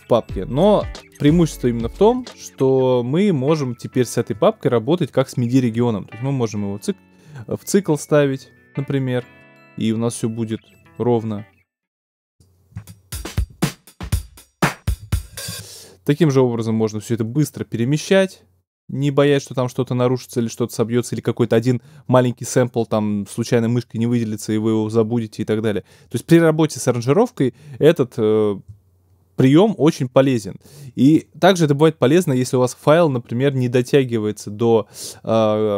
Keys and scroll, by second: 0.7 BackSpace, 12.7 space, 15.4 alt+super+space, 16.4 super+space.